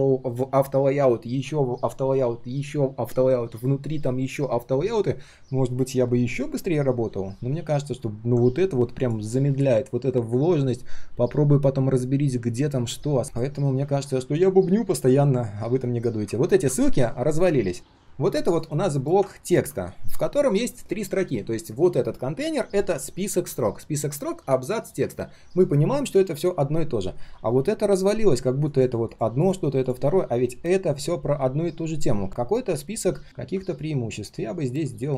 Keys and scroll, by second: 13.5 ctrl+shift+4, 15.7 ctrl+shift+3, 16.0 ctrl+shift+3.